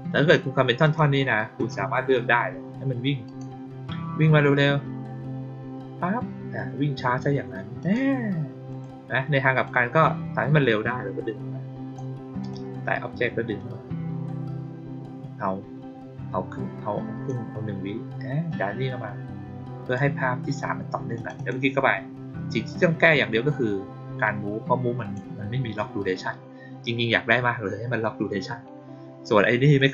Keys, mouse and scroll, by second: 0.7 click, 1.5 click, 3.2 click, 7.7 click, 8.6 click, 9.4 click, 10.8-11.9 drag, 12.3 click, 13.5-17.2 drag, 18.4-19.8 drag, 21.1 click, 21.3 click, 23.4-25.0 drag, 29.6 click.